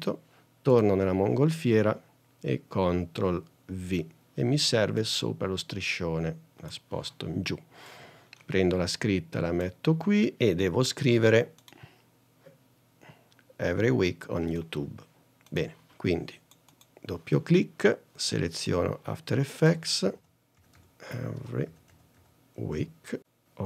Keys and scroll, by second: 4.0 super+v, 20.0-23.6 typing.